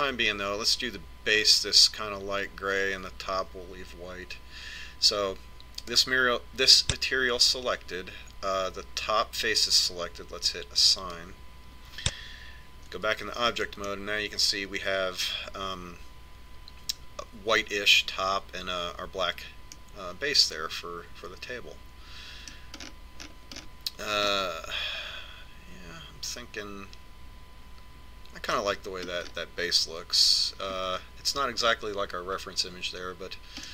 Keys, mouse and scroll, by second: 6.8 click, 12.0 click, 13.9 Tab, 14.8-16.6 middle drag, 20.8-22.8 middle drag, 23.9-27.2 middle drag, 27.3-30.3 middle drag, 30.4-32.6 middle drag.